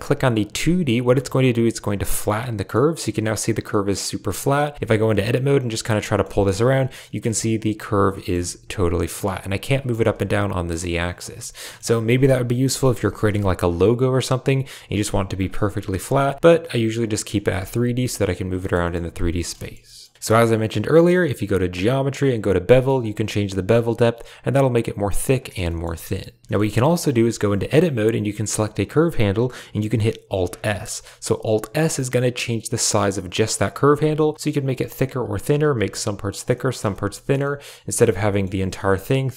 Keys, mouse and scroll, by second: 0.9 click, 2.2-2.6 middle drag, 3.4 click, 3.6 middle drag, 3.8-4.2 drag, 4.7 Tab, 4.8 click, 5.9 g, 6.0 click, 6.1 g, 7.1 click, 7.2 g, 8.2 click, 8.2 g, 9.2 g, 11.0 middle click, 11.1 a, 11.2 a, 11.6 middle click, 12.6 KP_7, 14.7 g, 15.5 r, 16.6 click, 17.0 click, 17.3 r, 17.8 g, 18.7 click, 19.2 Tab, 19.7 click, 23.0 shift+click, 23.2-25.2 shift+middle drag, 25.6 shift+middle click, 26.6 shift+middle click, 27.3 Tab, 30.3 alt+s, 33.9 alt+s, 35.1 click, 35.5 alt+s, 36.6 middle click, 37.0 middle click, 37.4 middle click, 37.9 shift+middle click, 38.1 Tab, 39.0-39.3 shift+drag.